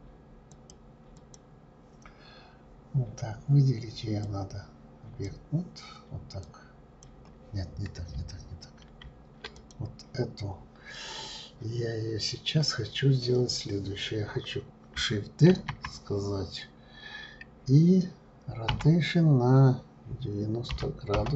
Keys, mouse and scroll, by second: 0.5 click, 1.2 click, 4.2-6.7 drag, 9.0 ctrl+z, 9.5 click, 15.5 shift+d.